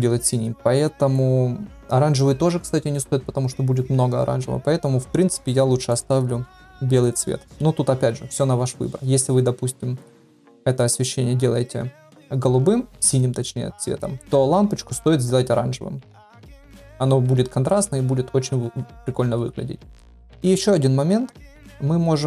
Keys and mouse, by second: 5.9-7.2 right drag, 21.3 KP_7.